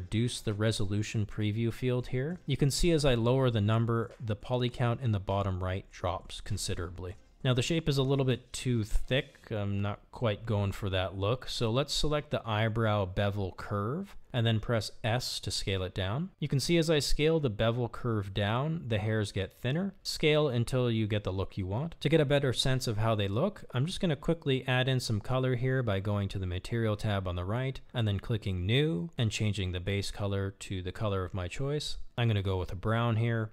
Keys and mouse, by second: 0.4 click, 0.8 click, 1.4 click, 2.5 click, 3.1 click, 11.1 s, 24.9 click, 31.6 click, 32.5 click, 32.7-33.5 drag.